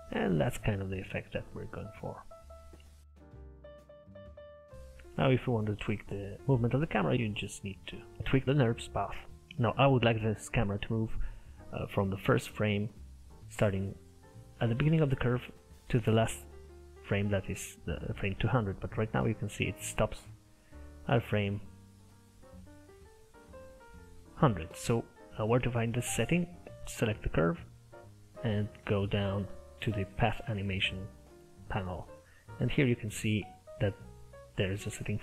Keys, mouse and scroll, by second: 0.3-3.1 scroll up 1, 26.8 Left, 28.0-31.3 scroll down 19, 31.3 click, 32.0-35.1 scroll down 6.